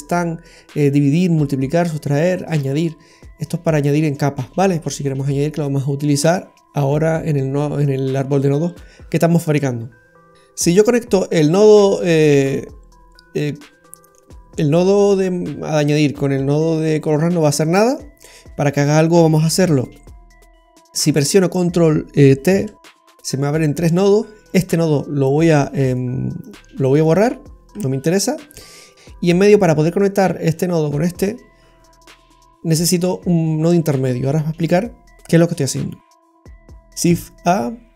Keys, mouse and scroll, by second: 11.2 click, 13.5-13.9 scroll down 3, 17.2 scroll down 1, 17.4 middle click, 19.6 shift+a, 22.6 ctrl+t, 24.4 click, 25.8 click, 26.4 click, 27.1 click, 27.7 Delete, 28.9 click, 36.6 shift+a.